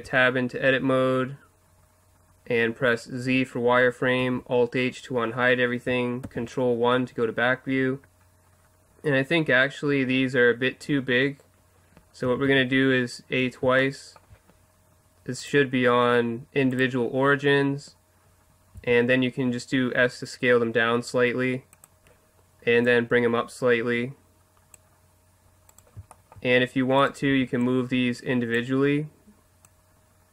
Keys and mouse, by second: 0.4-2.1 middle drag, 4.2 alt+h, 6.2 ctrl+KP_1, 12.3 a, 12.4 a, 15.4-15.8 drag, 16.0-18.1 drag, 18.8 s, 21.8-24.7 drag, 25.7-28.8 right drag, 27.3 b, 29.7-30.3 drag.